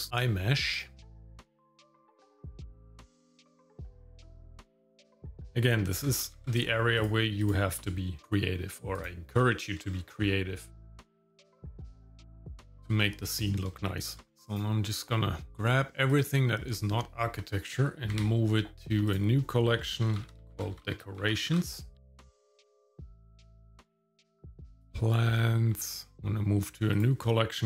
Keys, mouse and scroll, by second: 0.7 click, 1.0 scroll up 2, 1.2 click, 1.8 shift+middle click, 1.9 shift+middle click, 2.4 shift+click, 3.1 shift+click, 3.5 x, 3.9 click, 4.0 shift+click, 4.2 g, 4.8 g, 5.1 shift+middle click, 5.3 click, 5.3 shift+middle click, 5.4 scroll up 1, 6.0 g, 7.4 click, 8.2 g, 9.4 shift+middle click, 9.9 scroll down 1, 10.3 middle click, 11.3 alt+d, 12.1 shift+middle click, 12.4 scroll down 1, 12.5 shift+middle click, 12.7 middle click, 13.3 scroll down 1, 13.7 shift+middle click, 14.4 click, 16.2 shift+click, 18.1 m, 23.3 click, 23.7 m, 23.9 m, 24.8 shift+click, 25.9 ctrl+click, 26.1 m.